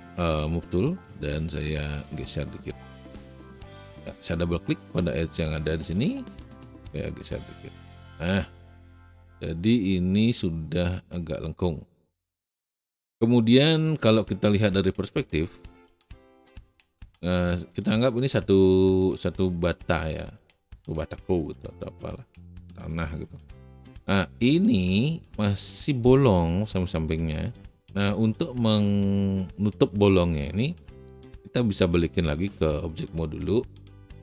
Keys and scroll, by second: 13.5 space.